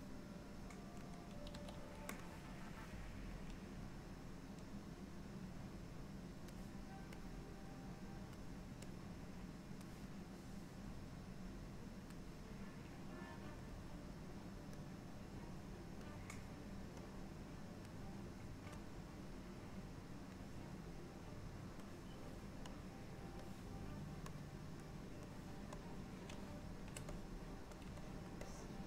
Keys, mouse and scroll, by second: 0.0 click, 1.6 f, 2.8 click, 7.3 click, 9.0 click, 11.1 click, 13.9 click, 15.6 click, 17.3 click, 18.9 click, 20.9 click, 22.8 click, 24.4 click, 25.9 click, 27.9 click, 28.1 shift+click, 28.5-28.8 shift+click.